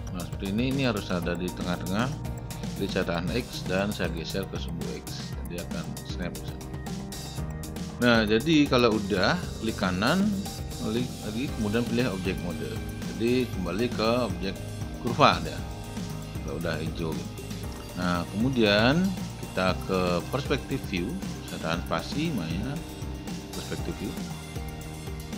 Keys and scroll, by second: 3.3 x, 20.0 space.